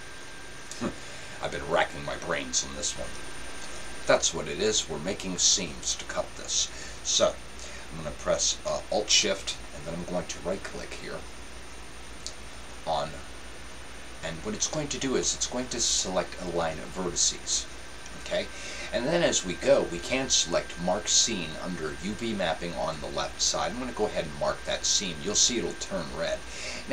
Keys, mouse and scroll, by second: 11.9-13.7 right drag, 15.2-17.1 middle drag, 23.9-25.9 drag.